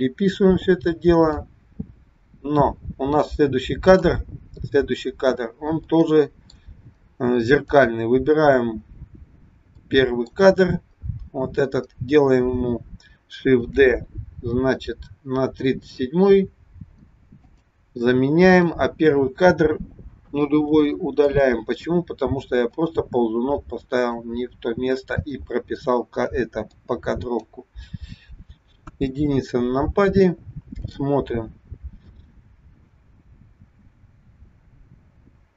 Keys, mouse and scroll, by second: 1.5 click, 4.9-5.4 scroll up 4, 5.4-5.8 scroll down 1, 5.8 middle click, 7.4 click, 8.7-9.7 scroll up 7, 9.7 middle click, 10.4-12.2 scroll up 4, 13.8 shift+d, 18.6 click, 20.6 Delete, 22.7 click, 23.7 click, 25.2 click, 26.8 click, 28.8 KP_1, 30.8 click, 32.2 click.